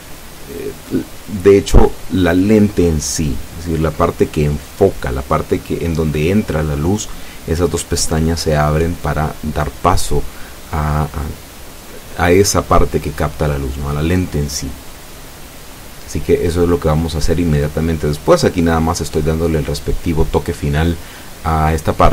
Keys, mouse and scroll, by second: 0.1 s, 4.1 click, 4.8 e, 5.1 y, 11.9 click, 12.7 e, 13.1 s, 17.7 click, 18.4 e, 18.7 s, 21.5 click.